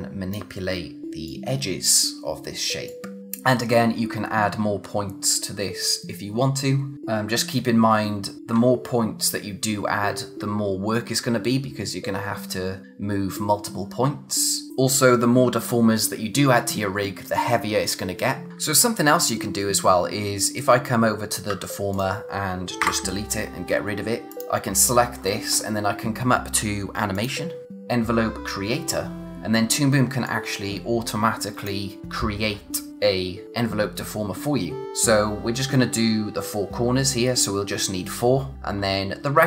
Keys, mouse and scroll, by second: 14.7 click, 19.3 click, 21.9 click, 24.3 click, 27.1 click, 29.2 click, 30.2 click.